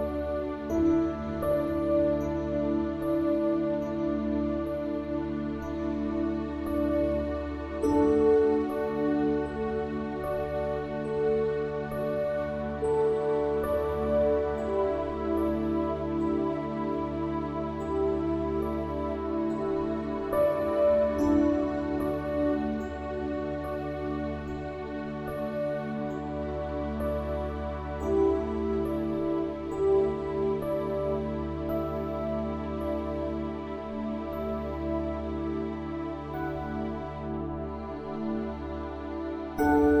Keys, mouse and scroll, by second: 0.0 click, 1.5 middle click, 2.0 shift+a, 3.0 r, 3.9 Tab, 4.2-6.5 typing, 9.1 a, 9.3 a, 9.6 s, 11.1 click, 13.1 click, 14.0 z, 14.5 click, 15.8-18.0 typing, 16.3 click, 17.2 click, 18.2 click, 18.4 Tab, 18.8 click, 19.4 click, 20.0 click, 20.4 Tab, 21.0-22.0 drag, 22.2 click, 23.4 r, 25.0 click, 26.2 click, 26.7 s, 28.6 click, 29.8 Tab, 32.0 Tab, 35.6 Tab, 36.4 Tab, 36.6 click, 37.3 e, 38.2-40.0 drag.